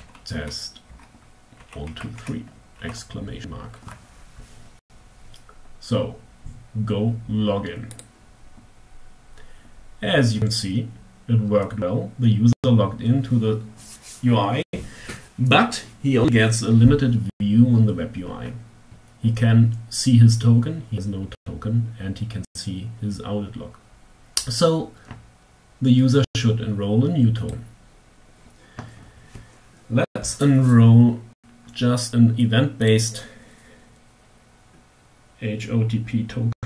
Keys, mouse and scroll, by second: 0.0-1.4 typing, 7.3 click, 26.9 click, 32.4 click.